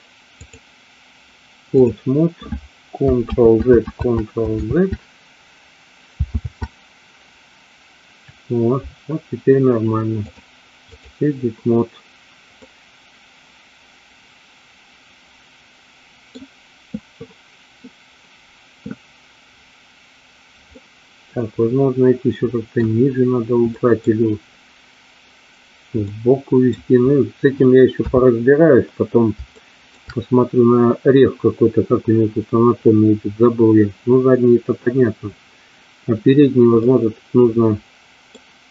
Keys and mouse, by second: 0.6-2.0 drag, 3.5 ctrl+z, 6.5 ctrl+z, 10.3-11.3 drag, 12.8-16.4 middle drag, 20.9-22.9 middle drag, 23.9 middle click, 26.2 middle click, 28.0 KP_3, 29.7 shift+middle click, 36.9-38.4 middle drag.